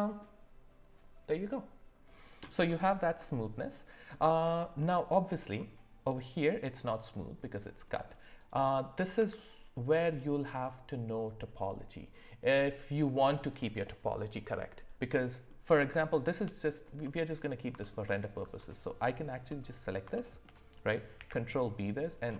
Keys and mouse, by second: 3.2 middle click, 4.8-5.2 middle drag, 7.9 middle click, 8.4 click, 9.1 Tab, 15.1 middle click, 17.0 middle click, 18.1 alt+middle click, 19.5 middle click, 20.1 shift+middle click, 21.2 ctrl+b.